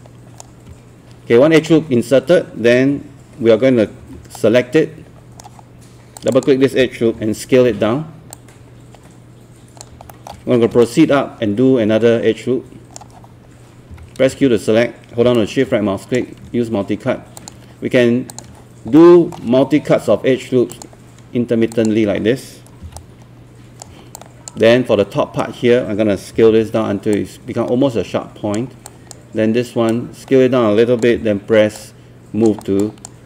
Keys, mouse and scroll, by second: 1.6 ctrl+click, 4.0 q, 4.4-5.7 right drag, 6.2-9.9 drag, 10.1 alt+middle click, 10.9-13.7 ctrl+right drag, 13.9 q, 15.3 shift+right click, 17.4 ctrl+click, 18.3 ctrl+click, 19.0 alt+middle click, 21.7 ctrl+click, 22.8 ctrl+q, 23.0 right click, 24.2 click, 26.1-27.0 typing, 27.1-31.2 drag, 31.2 w, 31.8 click.